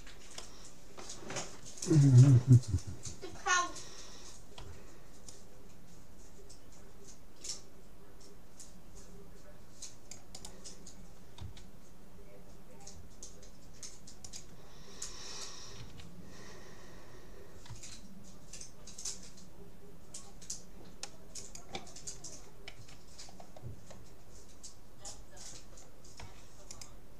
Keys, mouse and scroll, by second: 1.5 click, 4.6 c, 11.4 g, 15.8 s, 22.8 a, 23.3-24.7 scroll up 1, 24.7-25.1 scroll down 1, 25.1-26.7 middle drag, 26.3 c.